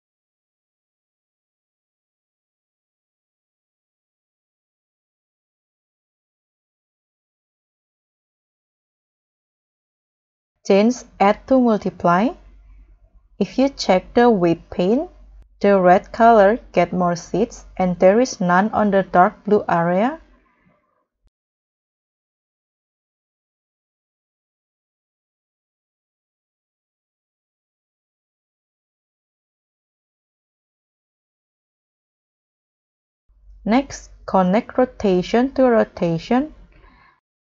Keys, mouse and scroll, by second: 2.3 scroll up 1, 2.3-2.6 scroll down 4, 2.6 middle click, 3.0 middle click, 3.3 scroll down 1, 3.6-4.3 scroll up 3, 12.9 scroll up 5, 13.1 middle click, 13.4-15.4 scroll down 2, 15.9 middle click, 22.1 middle click, 22.6 middle click, 22.6 middle click, 23.2-23.8 scroll down 6, 23.8-25.5 scroll up 6, 25.5 scroll down 1, 25.8-26.2 scroll up 1, 26.2 middle click, 26.4-26.8 scroll up 3, 27.1 middle click, 28.0-28.7 scroll down 7, 31.2 scroll down 2, 31.6 scroll up 6, 36.7 scroll down 1, 37.0-37.4 scroll up 4.